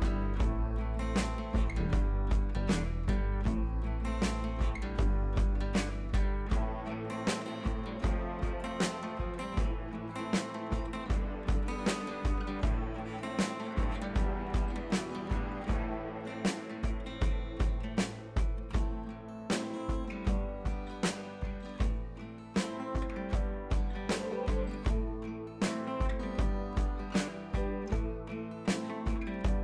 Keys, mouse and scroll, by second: 0.1 click, 1.2 b, 1.7-2.0 drag, 3.1 scroll down 1, 3.2-4.1 ], 4.8 ], 5.0-5.4 drag, 6.4 ], 6.6 ], 6.6-7.1 drag, 9.4 ], 9.5 ], 9.6 click, 10.4 [, 10.7 [, 10.7-11.7 click, 11.9-13.3 typing, 12.1 click, 12.8 click, 13.4 click, 14.6 [, 14.7 click, 15.7-17.4 typing, 15.8 click, 17.0 click, 17.5 click, 19.6 click, 21.1 b, 21.3 right click, 21.8-22.4 drag, 23.6 ctrl+z, 23.9-25.5 drag, 25.6 ctrl+z, 25.9 right click, 26.6-27.2 drag.